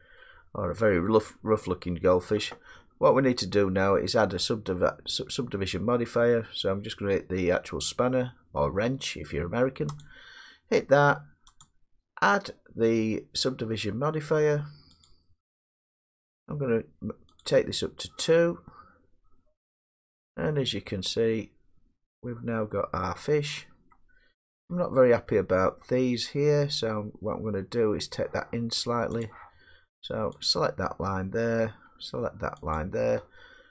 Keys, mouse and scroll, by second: 2.0 middle click, 4.1 middle click, 8.6 middle click, 10.0 click, 17.4 click, 20.3-22.4 drag, 23.9 middle click, 24.7 Tab, 25.8 middle click, 29.2 click, 30.4 click, 31.4 middle click, 32.8 shift+click.